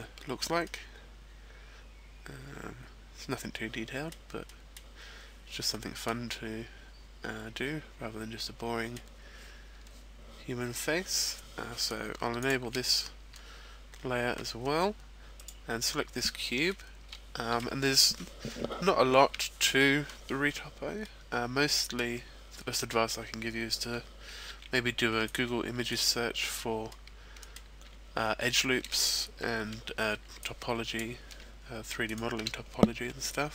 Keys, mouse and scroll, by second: 0.6 middle click, 4.5 middle click, 7.2 middle click, 8.4 middle click, 12.4 shift+click, 15.6 right click, 16.6 middle click, 19.3 Tab, 20.9 middle click, 24.5 ctrl+r, 26.0 right click, 26.8 middle click, 27.8 z, 28.5 a, 30.1 b, 32.0 shift+right click, 32.9 x.